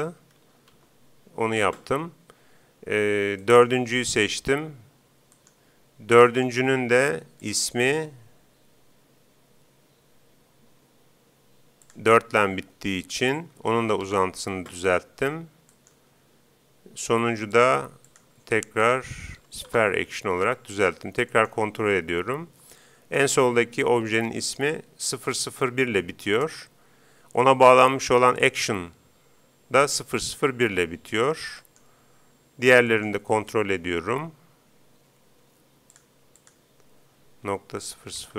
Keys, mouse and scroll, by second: 0.1 0, 3.4-5.1 right drag, 5.3-8.0 right drag, 7.4-9.0 drag, 15.7-17.5 right drag, 17.6-19.0 drag, 19.0 BackSpace, 19.4 BackSpace, 21.4-23.0 right drag, 31.6-34.6 right drag, 36.0-37.7 drag, 38.0 0.